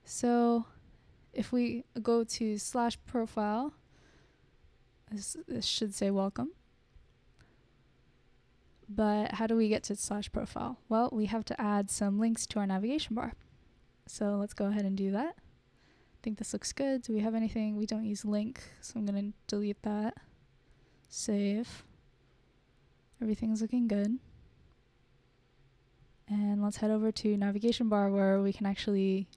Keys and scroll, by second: 2.6-4.6 typing, 10.4 BackSpace, 10.7 Return, 19.1 BackSpace, 19.3 BackSpace, 19.5 BackSpace, 20.6 super+s.